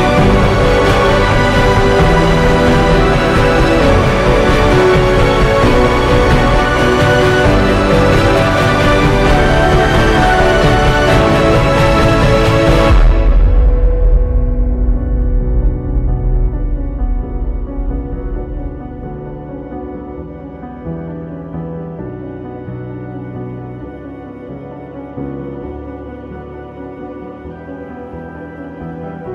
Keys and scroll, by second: 6.9-7.8 typing, 15.4 ctrl+j, 18.0 ctrl+j, 18.2 ctrl+g, 18.3-19.4 typing, 19.8 Delete, 20.7-22.0 typing, 24.1 ctrl+t, 29.0 ctrl+j.